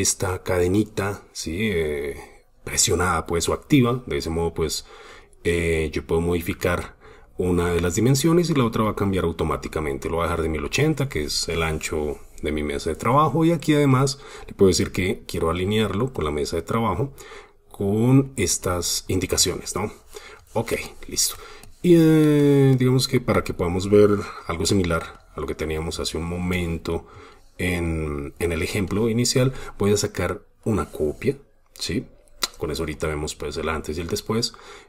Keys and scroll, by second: 25.1 super+space.